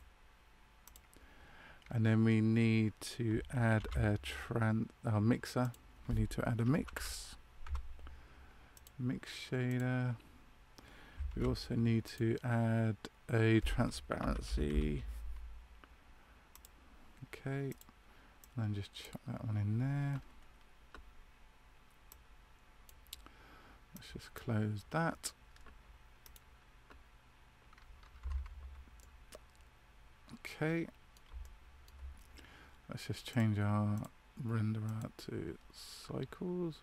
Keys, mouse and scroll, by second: 26.3 click, 28.1 Tab, 28.9 middle click, 31.3 shift+middle click, 33.2 click, 34.3 click.